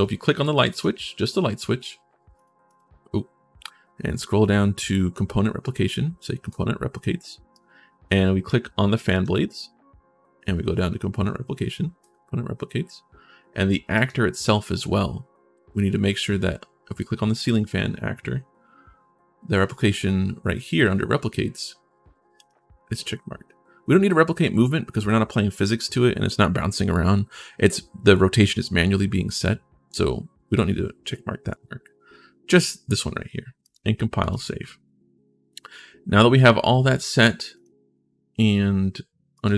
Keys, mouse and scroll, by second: 3.5-4.5 scroll down 20, 6.2 click, 7.3 click, 8.9 click, 11.8 click, 13.7 click, 22.1 click, 33.4 click, 34.0 click, 37.3 click, 39.1 click.